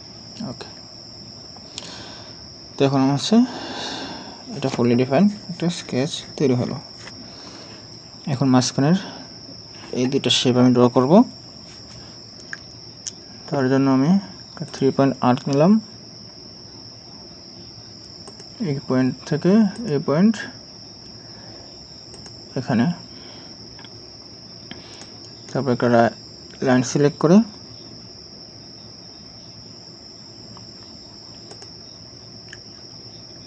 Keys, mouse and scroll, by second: 0.7 scroll up 1, 25.0 right click.